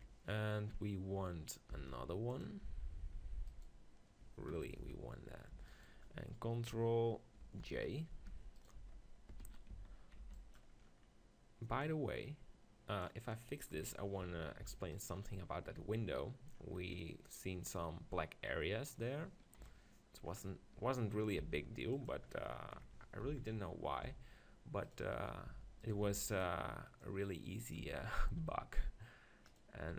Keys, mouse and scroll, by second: 0.0 KP_7, 1.7 shift+d, 2.7 Tab, 3.2 Tab, 4.5 click, 4.8 z, 5.7-7.5 drag, 7.5 ctrl+j, 8.3 Tab, 8.7 right click, 8.8 z, 9.7 right click, 9.7 z, 10.2 b, 10.9 middle click, 11.8-13.6 drag, 13.9 KP_1, 14.2 Tab, 14.6 z, 15.8-16.9 middle drag, 19.6 KP_7, 21.4 g, 22.1-23.7 drag, 23.2 z, 24.6 r, 24.9-27.2 right drag, 25.5 Tab, 26.0 b, 27.0 click, 27.9 Tab, 28.3 r, 29.9 Tab.